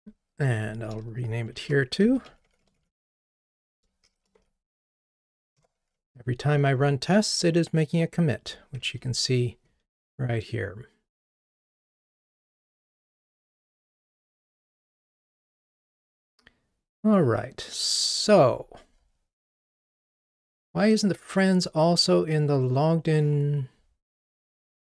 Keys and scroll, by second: 1.5 shift+F6, 6.1 ctrl+r, 9.3 super+9, 13.2 super+9.